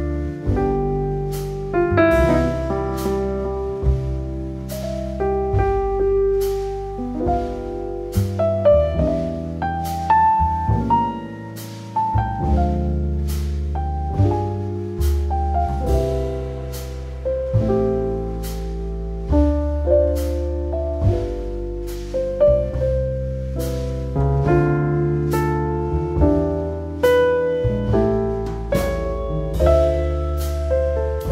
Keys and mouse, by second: 0.8 click, 2.3 middle click, 4.8 f, 5.8 i, 9.2 middle click, 10.0 alt+middle click, 10.4 KP_1, 11.5 shift+middle click, 12.4 e, 13.9 z, 14.4 z, 16.0 click, 16.6 s, 19.9 click, 20.7 Tab, 21.0 Tab, 21.9 alt+middle click, 23.4 click, 23.9 middle click, 25.2 alt+middle click, 25.8 shift+middle click, 26.2 click, 27.4 click, 27.9-29.1 drag, 29.6 alt+middle click, 30.1 Tab.